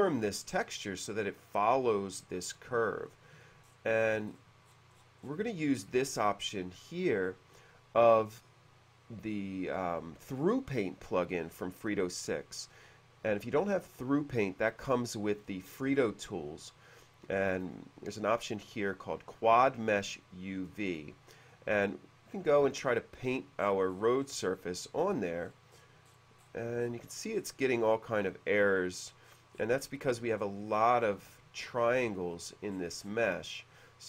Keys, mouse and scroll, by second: 3.2 shift+middle click, 3.9-4.7 scroll up 2, 4.8-5.4 scroll down 2, 17.7 click, 18.8 click, 21.6 click, 23.4-24.6 scroll up 3, 23.8 middle click, 24.9 scroll down 1, 25.6-26.8 scroll up 2, 26.9 middle click, 27.7 middle click, 29.4 middle click, 30.2 middle click, 30.6 middle click, 31.4 shift+middle click, 32.8-33.4 scroll up 2.